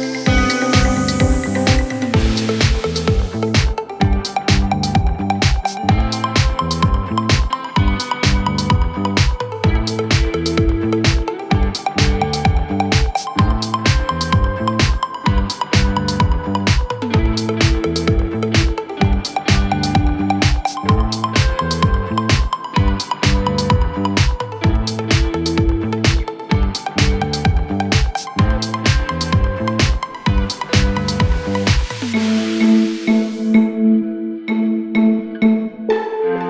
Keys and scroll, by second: 14.8 KP_Add, 16.5 ctrl+q, 32.3 b, 36.3 ctrl+Page_Down.